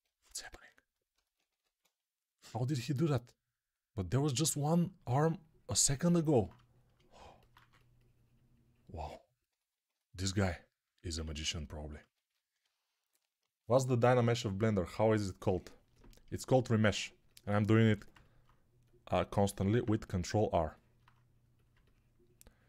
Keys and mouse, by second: 1.4 1, 7.4 2, 11.1 ctrl+z, 17.7 g, 19.5 alt+q.